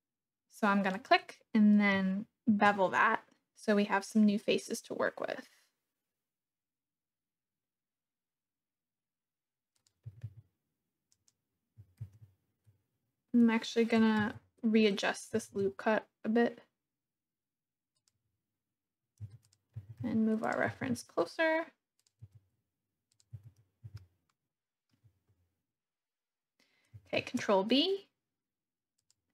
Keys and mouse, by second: 0.9 click, 2.4 ctrl+b, 9.8 click, 10.0 g, 10.2 g, 11.2 click, 12.0 ctrl+z, 14.1 ctrl+z, 15.3 g, 15.5 g, 17.9 click, 18.5 middle click, 19.3 Tab, 19.5 click, 19.8 g, 20.1 x, 20.5 click, 20.7 g, 21.0 z, 22.1 click, 22.2 Tab, 23.4 Tab, 24.0 shift+click, 27.1 ctrl+b, 29.0 click.